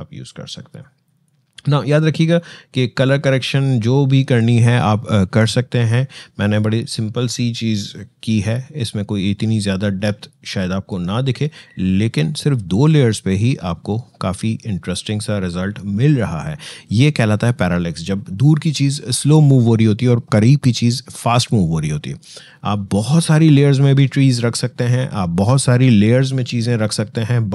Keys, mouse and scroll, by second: 9.6 shift+space.